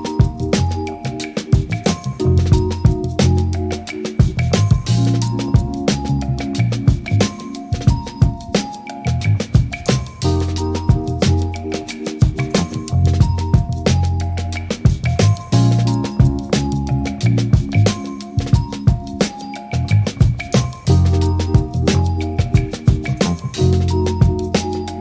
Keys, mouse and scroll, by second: 0.0 click, 0.0 ctrl+middle click, 0.1 KP_1, 0.3 click, 0.5 click, 0.6 middle click, 0.9 middle click, 1.0 f, 1.2 middle click, 1.2 click, 1.4 ctrl+z, 1.6 ctrl+z, 1.7 middle click, 1.9 click, 2.2 shift+click, 2.2 middle click, 2.3 shift+click, 2.5 middle click, 2.7 click, 2.8 click, 3.3 click, 3.6 click, 3.7 middle click, 3.8 click, 3.9 click, 4.1 ctrl+z, 4.4 middle click, 4.8 middle click, 4.9 click, 4.9 middle click, 5.0 click, 5.6 click, 5.6 middle click, 5.7 ctrl+click, 5.9 ctrl+click, 6.1 ctrl+click, 6.7 middle click, 6.9 ctrl+shift+click, 6.9 middle click, 7.1 shift+click, 7.3 middle click, 7.5 click, 7.6 middle click, 7.7 click, 7.9 ctrl+click, 8.1 click, 8.2 click, 8.3 middle click, 8.9 shift+click, 8.9 ctrl+middle click, 9.0 shift+click, 9.0 middle click, 9.1 click, 9.2 middle click, 9.3 shift+click, 9.4 ctrl+click, 9.7 middle click, 9.8 click, 9.9 middle click, 10.1 middle click, 10.4 click, 10.5 click, 10.6 middle click, 10.7 click, 10.8 ctrl+z, 10.9 click, 11.0 click, 11.2 f, 11.4 click, 11.6 middle click, 11.7 middle click, 11.7 click, 11.8 click, 11.9 ctrl+shift+z, 12.2 middle click, 12.2 click, 12.4 click, 12.4 middle click, 12.5 f, 12.8 click, 12.9 f, 13.0 click, 13.1 click, 13.2 click, 13.3 middle click, 13.4 click, 13.5 middle click, 13.6 click, 14.1 click, 14.2 middle click, 14.8 middle click, 14.9 click, 14.9 middle click, 15.1 click, 15.1 f, 15.2 click, 15.3 middle click, 15.3 ctrl+z, 15.4 click, 15.5 middle click, 15.5 click, 15.6 click, 15.7 middle click, 15.9 middle click, 16.0 click, 16.1 f, 16.4 f, 16.5 click, 16.6 middle click, 16.7 click, 16.9 click, 17.1 click, 17.2 middle click, 17.9 KP_3, 18.0 click, 18.2 middle click, 18.2 click, 18.3 middle click, 18.5 click, 18.6 click, 18.8 middle click, 18.8 click, 18.9 middle click, 19.0 click, 19.1 middle click, 19.2 f, 19.2 click, 19.4 click, 19.5 middle click, 19.6 click, 20.4 click, 20.6 middle click, 20.6 click, 20.8 click, 20.9 click, 21.0 click, 21.1 ctrl+middle click, 21.3 click, 21.6 middle click, 21.6 click, 21.9 f, 22.2 middle click, 22.3 click, 22.4 middle click, 22.5 click, 22.7 middle click, 23.0 middle click, 23.2 click, 23.5 click, 23.7 click, 23.8 middle click, 23.9 click, 24.1 click, 24.1 middle click, 24.2 middle click, 24.4 click, 24.4 middle click, 24.7 shift+click, 24.8 click.